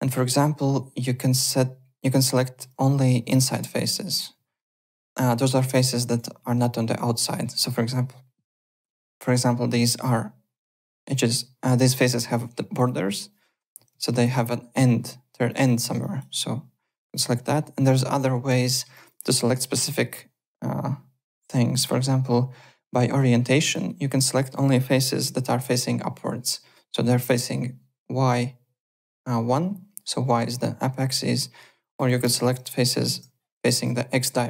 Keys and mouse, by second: 0.1 alt+middle click, 2.4 alt+middle click, 3.3 click, 4.5 alt+middle click, 4.8 alt+right click, 5.0 alt+click, 6.0 alt+right click, 10.6 click, 14.2 alt+click, 15.4 alt+click, 16.0 alt+click, 16.9 click, 18.6 alt+middle click, 18.9 alt+click, 19.7 click, 21.7 click, 23.6 click, 24.2 click, 25.2 KP_1, 25.2 Return, 31.8 click, 32.1 KP_0, 32.2 Return, 32.5 click, 32.9 KP_1, 33.1 Return, 33.8 alt+click.